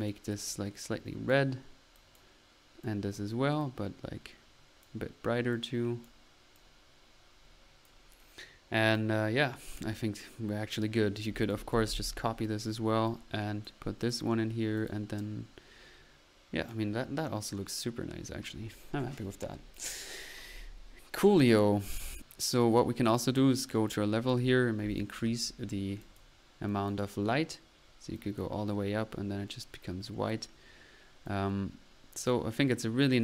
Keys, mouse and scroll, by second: 0.4-1.5 drag, 2.0-2.4 drag, 2.9-3.4 drag, 3.6-5.1 drag, 5.5-6.1 drag, 6.6-7.9 drag, 8.3 middle click, 8.8 click, 11.4 ctrl+click, 11.7 ctrl+c, 11.9 ctrl+v, 12.5 ctrl+click, 12.5-13.2 typing, 17.1 middle click, 19.8-20.4 drag, 21.9-22.8 typing, 22.1 click, 22.7 click, 23.1 click, 24.3 click, 26.1-27.3 drag, 28.2 click, 31.3-33.2 drag.